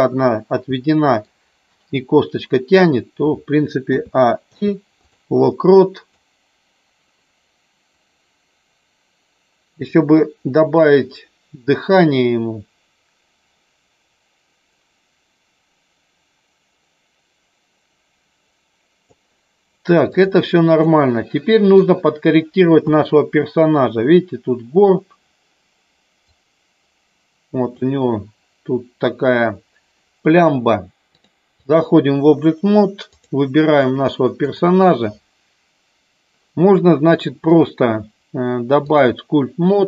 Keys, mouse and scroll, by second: 0.8 middle click, 3.8 a, 4.4 i, 6.1-19.2 drag, 20.8 middle click, 22.7 KP_3, 26.2-27.8 drag, 31.1 click, 33.1 click, 34.3 click, 37.4-39.1 drag.